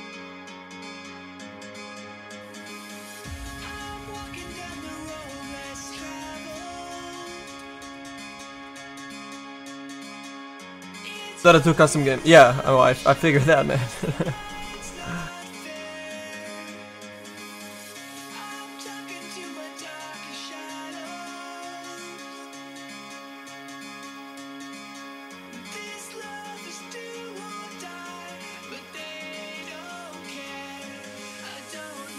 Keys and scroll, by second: 19.1 s, 20.1 s, 23.5 s, 31.1 z.